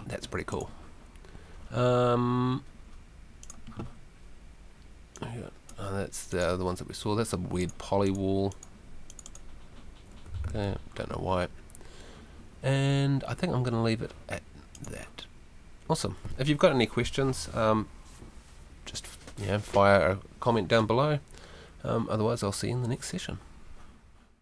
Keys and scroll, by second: 10.5 super+z.